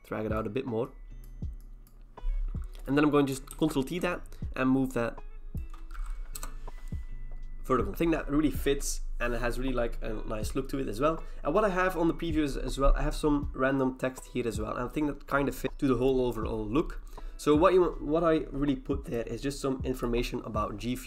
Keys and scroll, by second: 3.5 ctrl+t, 6.4 Return.